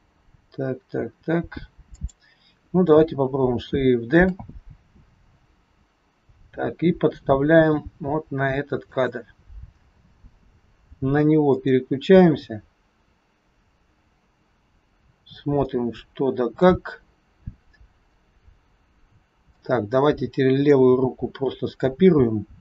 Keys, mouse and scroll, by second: 4.1 shift+d, 11.6 click, 15.2-15.6 scroll down 2, 15.6 middle click, 16.9-18.2 scroll up 2, 19.6 click.